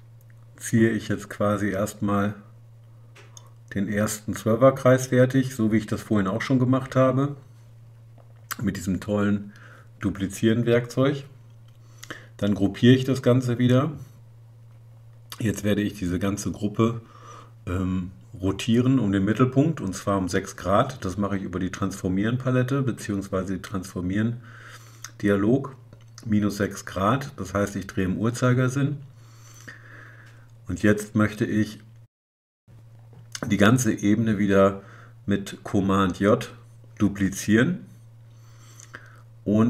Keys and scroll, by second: 2.1 super+j, 12.5 super+g.